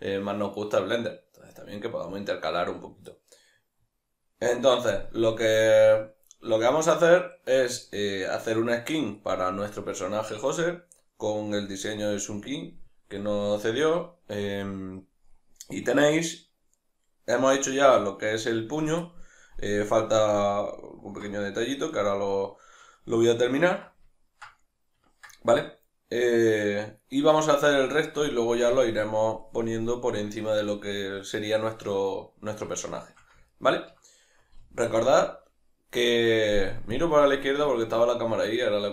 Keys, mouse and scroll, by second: 8.1 middle click, 15.3 middle click, 20.6 ctrl+middle click, 21.3-38.9 middle drag, 34.6 alt+q.